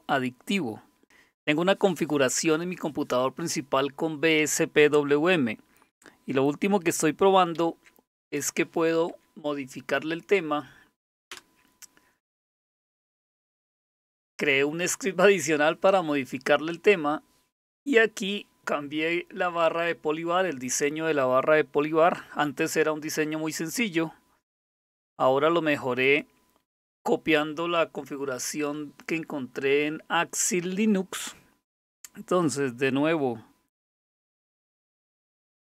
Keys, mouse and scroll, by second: 7.5 alt+super+t, 9.1 Down, 11.3 Return, 24.5 click, 25.1 click, 25.3 click, 26.0 click.